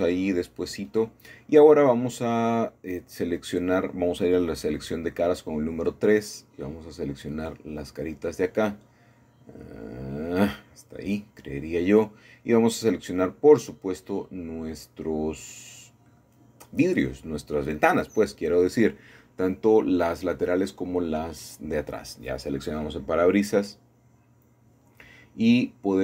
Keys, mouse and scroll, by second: 0.6 Tab, 1.2-2.5 middle drag, 2.4 a, 2.5 a, 4.0 3, 5.0-5.7 scroll up 2, 5.7-6.8 shift+middle drag, 6.8-12.7 drag, 9.3 typing, 11.9 Escape, 13.2 shift+middle click, 14.2 shift+middle click, 15.0 middle click, 15.6-16.7 scroll down 1, 16.9-18.2 shift+middle drag, 18.8 middle click, 20.3 middle click, 20.7-21.9 scroll up 1, 21.9 shift+scroll up 1, 21.9-23.0 shift+middle drag, 25.0 click.